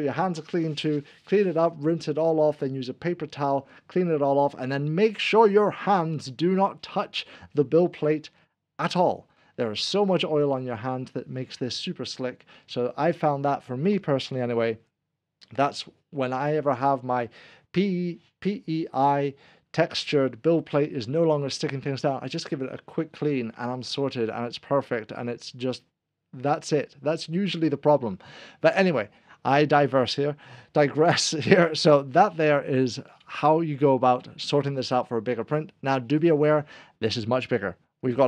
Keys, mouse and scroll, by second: 31.6 click, 33.3 middle click, 34.7 click.